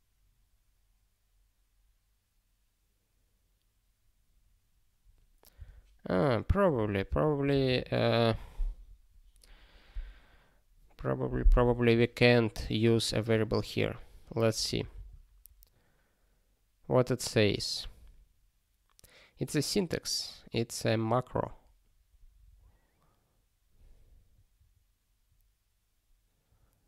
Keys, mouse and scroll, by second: 5.5 q, 6.6 click, 12.9 click.